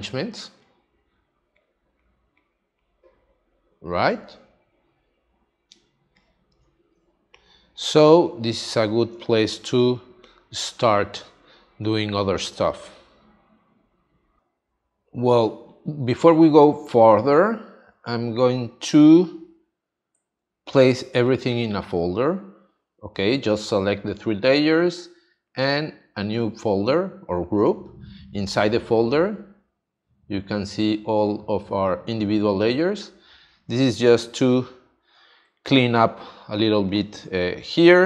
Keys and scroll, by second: 5.7 space, 8.2 space, 11.1 space, 14.4 space, 34.1 space, 36.5 space.